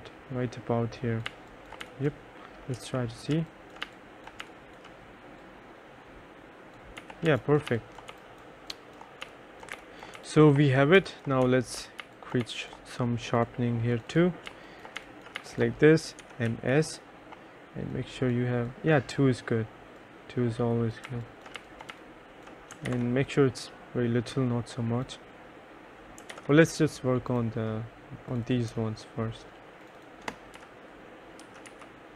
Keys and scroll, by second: 1.4-4.6 typing, 6.9-10.3 typing, 11.6 3, 12.2 2, 12.5 1, 14.4-16.6 typing, 20.9-22.5 typing, 23.0 ctrl+z, 26.4 ctrl+z, 30.7 3, 31.5 m, 31.8 s.